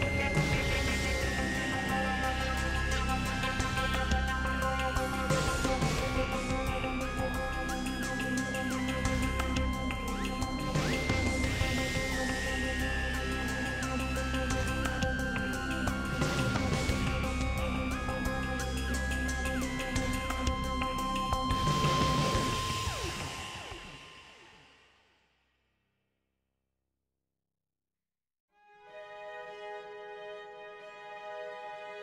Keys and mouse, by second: 1.4 ctrl+r, 4.9 3, 5.3 alt+z, 5.7 click, 6.4-8.8 drag, 8.8 r, 9.8 s, 10.7 KP_Decimal, 10.9 alt+z, 13.1 g, 18.9 alt+z, 19.2 click, 20.4 e, 22.2 i, 31.7 Tab.